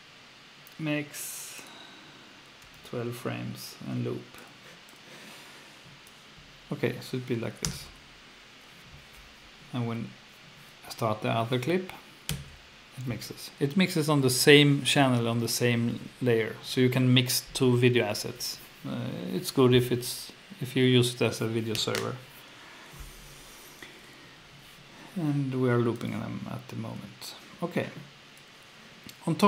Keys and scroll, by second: 2.4-3.2 typing, 7.6 F2, 9.7 Down, 12.3 F2.